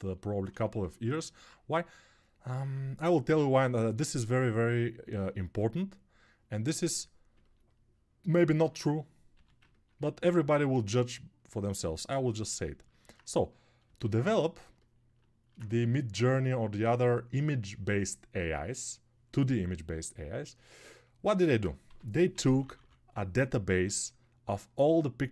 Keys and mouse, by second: 0.8 1, 16.9 shift+2.